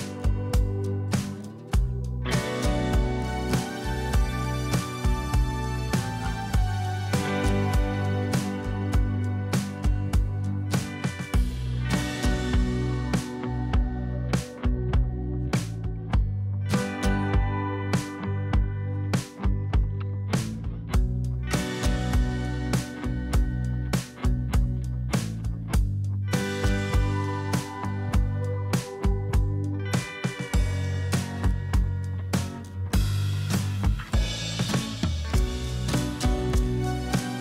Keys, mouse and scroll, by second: 0.4 alt+scroll down 2, 0.9 alt+scroll up 1, 4.8 shift+click, 6.1 shift+click, 8.8 double click, 10.3-11.1 typing, 17.4-18.6 typing, 20.2-24.5 typing, 22.1 Return, 26.1-29.4 typing, 30.4 Return, 30.4-32.0 typing, 32.6-37.4 drag.